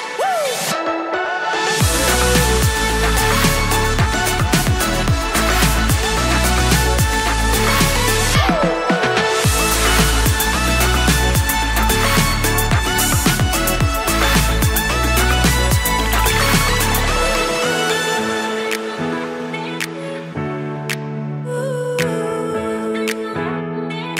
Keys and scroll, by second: 3.6 shift+super+Left, 3.8 super+c, 14.6 super+Right, 22.5 super+Tab.